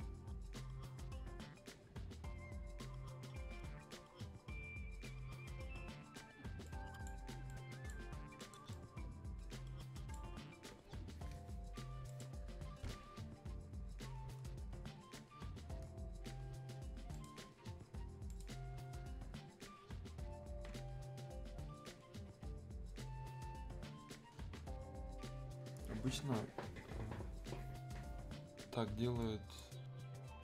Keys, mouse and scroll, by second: 6.6-12.1 drag, 17.1 click, 24.7-25.2 scroll up 1, 29.2-30.4 drag.